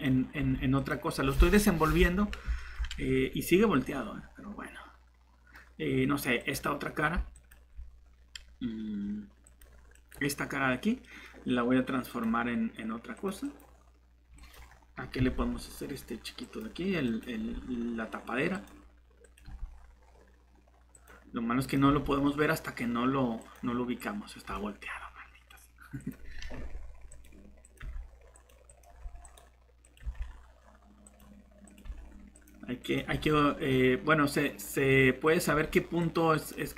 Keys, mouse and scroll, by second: 0.4 g, 0.8 g, 15.2 shift+g, 17.4 g, 19.4 g, 21.9 g, 26.5 g, 27.8 g, 28.9 g, 30.0 g, 31.8 g, 33.1 g, 35.5 g, 36.6 g.